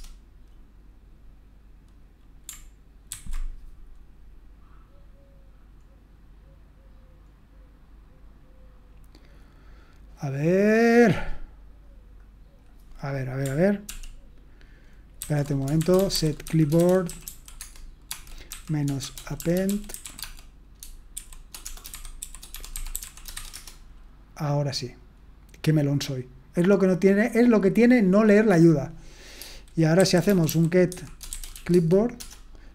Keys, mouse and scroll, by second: 3.1 ctrl+c, 12.6-13.9 drag, 13.9 ctrl+p, 15.2 ctrl+c, 15.6-24.0 typing, 29.8-32.0 typing, 32.2 Return.